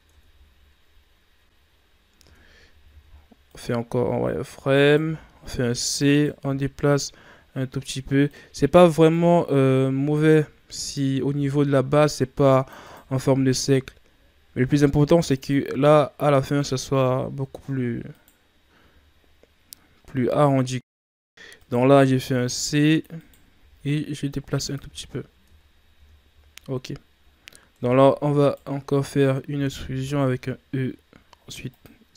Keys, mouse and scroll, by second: 0.1 Tab, 0.8 scroll down 2, 1.7-2.1 scroll up 5, 2.1 Tab, 2.5 scroll up 1, 2.9 z, 3.4 right click, 4.8 right click, 5.0 c, 6.9-10.7 drag, 10.7 right click, 11.3 c, 17.2-18.0 scroll down 2, 18.0 right click, 21.6 right click, 22.0 c, 22.2 c, 23.7 g, 25.0 scroll down 2, 25.4 Tab, 25.7-26.1 scroll down 3, 26.3 scroll down 1, 27.3-27.7 scroll up 5, 27.7 Tab, 28.4 alt+right click, 29.5 e, 30.8 e.